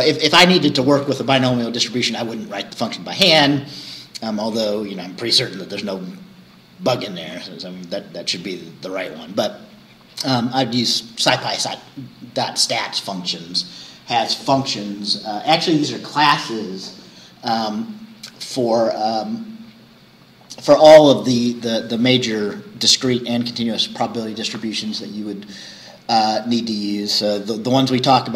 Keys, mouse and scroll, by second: 2.9-3.3 scroll down 2, 4.1-5.7 scroll up 2, 5.7-7.1 scroll up 1, 7.1-7.4 scroll down 2, 8.6-9.0 scroll down 2.